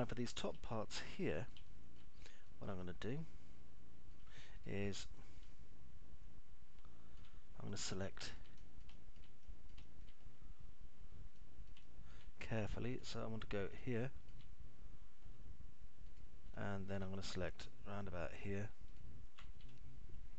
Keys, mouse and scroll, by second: 0.8 middle click, 2.3 alt+middle click, 2.9-4.8 middle drag, 4.9 click, 5.9-7.6 alt+middle drag, 8.3 alt+middle click, 9.4 alt+middle click, 9.8 middle click, 12.4 alt+middle click, 14.6 alt+middle click, 16.9 alt+middle click.